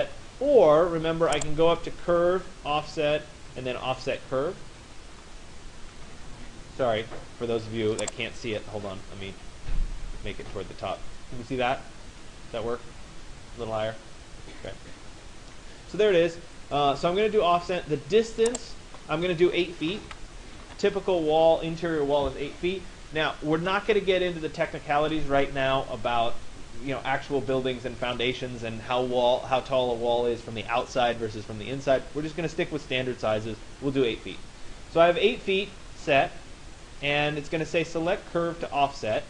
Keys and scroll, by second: 5.5 Escape, 19.6 8, 20.7 Return.